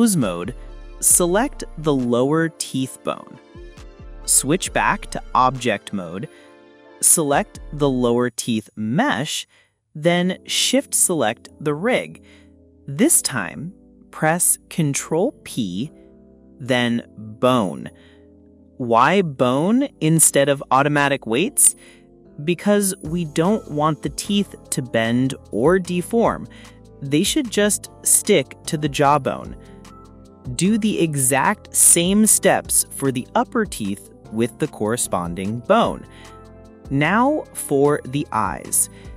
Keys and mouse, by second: 0.4-1.6 drag, 4.8 click, 6.0 click, 7.2 click, 7.8 click, 10.8-11.4 drag, 15.7 click, 16.9 shift+click, 18.2 ctrl+p, 21.6-22.6 drag, 24.2 drag, 25.1 click, 25.6 click, 26.2-26.8 middle drag, 26.8 click, 27.3 click, 29.7-31.0 drag, 32.6 click, 33.3 click, 35.4 shift+click, 36.8 ctrl+p.